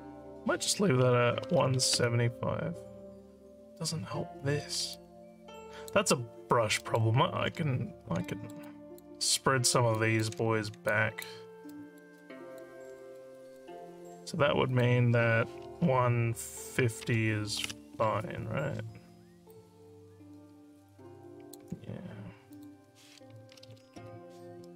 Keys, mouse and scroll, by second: 4.9 alt+click, 6.8 alt+middle click, 8.3 alt+middle click, 8.7 alt+click, 10.0 alt+click, 10.9 alt+click, 11.7 alt+middle click, 12.2 alt+click, 13.0 alt+middle click, 13.4 alt+click, 14.7 click, 19.5-21.5 alt+drag, 22.5 click.